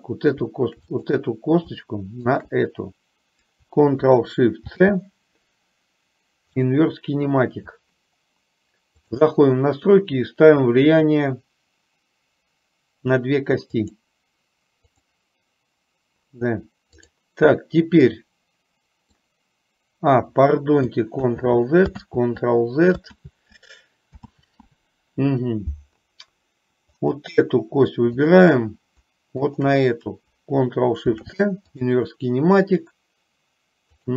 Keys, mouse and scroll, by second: 1.1 click, 2.5 shift+click, 4.7 ctrl+shift+c, 13.9 click, 15.0 click, 17.1-17.5 drag, 18.2-19.4 middle drag, 21.4 ctrl+z, 22.1 ctrl+z, 23.5 ctrl+z, 24.6 ctrl+z, 27.0 click, 29.5 shift+click, 31.2 ctrl+shift+c, 34.0 click.